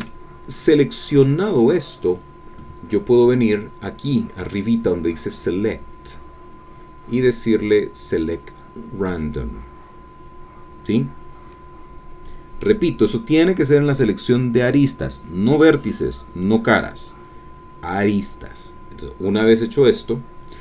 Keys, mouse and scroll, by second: 5.6-7.1 drag, 9.1 click.